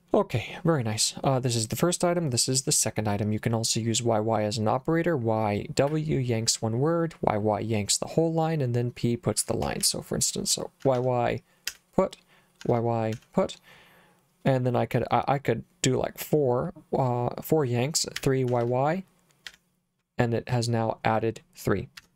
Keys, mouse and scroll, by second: 9.1-13.6 typing, 17.9-19.5 typing, 22.0 Escape.